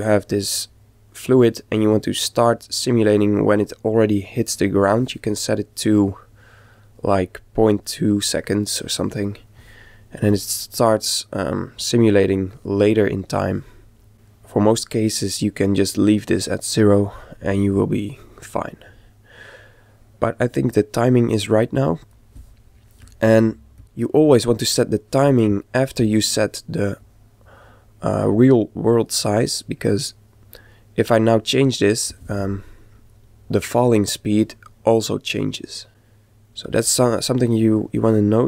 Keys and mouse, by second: 10.3 click, 14.0 click, 18.4 click, 23.8 click, 26.0-28.7 drag.